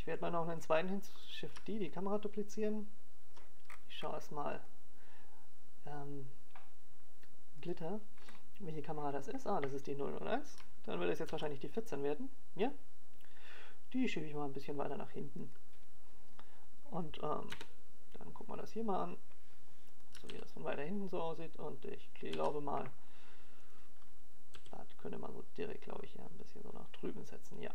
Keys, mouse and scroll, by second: 0.1 alt+a, 5.7 KP_7, 6.9 shift+middle click, 10.4-11.3 scroll up 5, 11.3 click, 14.4 click, 14.9-15.7 scroll down 1, 15.7 scroll down 2, 18.1 shift+d, 22.4 click, 24.4 KP_0, 26.8 click, 27.2 alt+a.